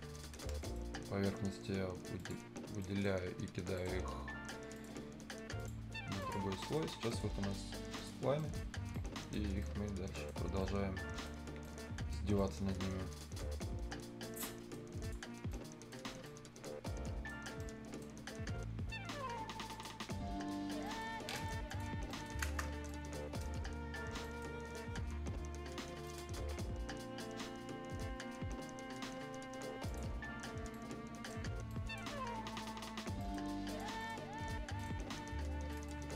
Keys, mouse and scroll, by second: 0.1 Escape, 0.6 middle click, 2.1 click, 2.8 right click, 4.7 click, 6.6 right click, 6.9 scroll up 1, 7.0 right click, 7.9 click, 8.3 right click, 8.7 scroll up 1, 8.9 right click, 9.3 scroll down 1, 9.6 right click, 10.4 scroll up 1, 10.6 right click, 11.4 scroll up 1, 11.6 right click, 12.2 scroll down 1, 12.3-14.1 right drag, 14.1 scroll up 1, 14.2 right click, 15.0 click, 15.3 scroll up 1, 15.5 right click, 16.0 scroll down 1, 16.2 right click, 17.4 scroll up 1, 17.5 right click, 19.7 click, 20.2-20.6 scroll down 1, 20.6 scroll up 1, 20.8 right click, 21.0 Escape, 21.3 right click, 21.6 click, 22.0 scroll up 1, 22.0 right click, 22.4 ctrl+space, 22.8 right click, 24.5 scroll up 1, 26.0 click, 26.8-27.2 scroll down 1, 27.2 scroll up 1, 27.7 scroll down 1, 27.9 scroll up 1, 29.8 click, 30.1 scroll down 1, 30.7 middle click, 31.4 scroll up 1, 31.7 right click, 33.0 scroll down 1, 33.2 right click, 33.4 scroll up 1, 33.7 click, 34.0 right click, 34.2 scroll up 1, 34.7 right click, 35.2 scroll up 1, 35.7 right click.